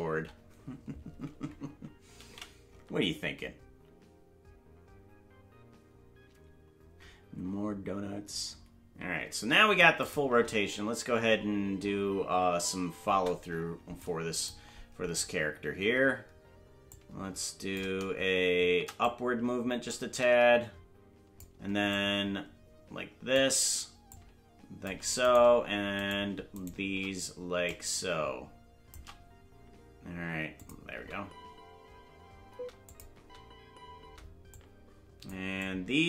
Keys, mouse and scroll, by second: 4.0 ctrl+s, 10.0 click, 10.2 space, 13.4 space, 14.0 click, 16.9 click, 19.0-21.4 drag, 21.9-23.4 shift+drag, 24.1 click, 25.3 right click, 26.0-27.0 shift+right drag, 27.6-28.9 drag, 30.6 click, 30.9 space, 32.7 space, 32.9 click, 33.1 space, 34.5 click, 34.5 space, 35.6 click.